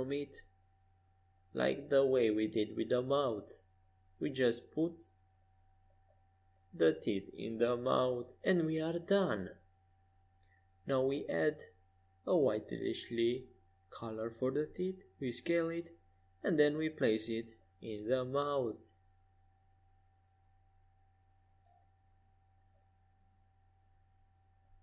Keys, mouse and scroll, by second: 4.9-6.8 drag, 7.6-9.5 drag, 14.1 s, 15.9 click, 17.1 click, 17.9 middle click, 18.6 s, 19.6 middle click, 20.0 middle click, 20.9 z, 22.3-24.8 drag, 24.2 middle click, 24.2 right click.